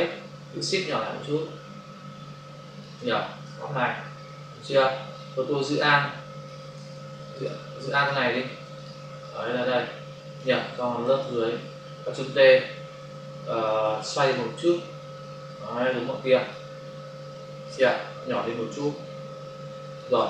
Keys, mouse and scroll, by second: 0.5 shift+click, 3.4 Return, 4.2 click, 5.7 alt+click, 6.8 ctrl+z, 7.4 ctrl+click, 7.9 ctrl+click, 8.0 ctrl+double click, 8.7 ctrl+click, 9.2 alt+click, 14.3 click, 18.8 shift+click.